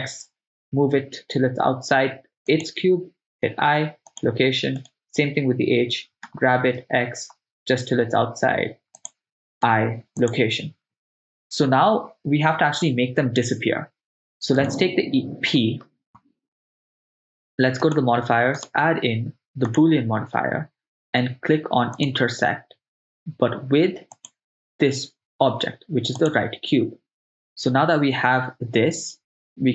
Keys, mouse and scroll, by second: 2.6 click, 3.5 i, 5.0 right click, 6.3 g, 6.8 x, 9.0 click, 9.7 i, 14.6-17.7 drag, 14.6 right click, 17.8 click, 18.6-19.9 drag, 22.0 click, 24.2 click.